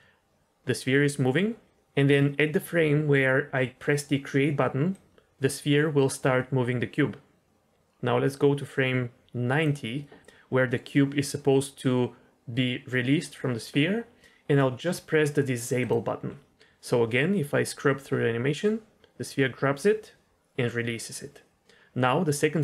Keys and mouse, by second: 4.9-9.6 drag, 15.7 click, 16.8-22.6 drag.